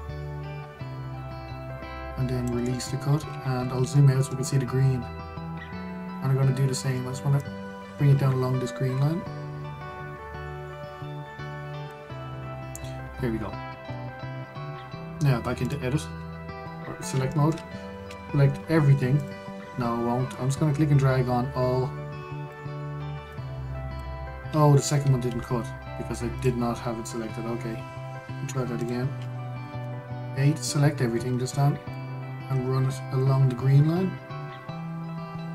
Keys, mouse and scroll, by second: 0.1 click, 4.2-4.6 scroll, 4.6-7.8 shift+middle drag, 8.1 click, 16.3-18.0 drag, 18.0 shift+middle click, 18.7 a, 19.9 click, 21.0 click, 24.0 click, 25.9 ctrl+z, 27.0 click, 29.5-30.5 drag, 30.5 a, 32.6 click.